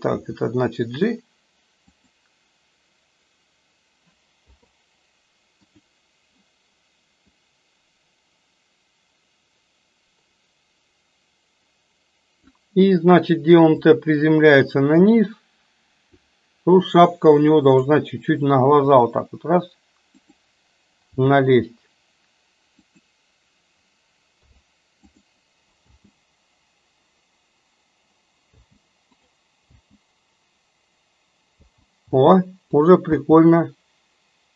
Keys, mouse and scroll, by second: 0.2 g, 4.4 i, 7.5-12.6 drag, 14.0-16.4 drag, 17.7 click, 18.9 r, 21.1 g, 24.4 i, 25.9 space, 28.6 space, 29.4 click, 29.9 space, 31.8 space, 32.1 space, 32.9 click, 33.2 space.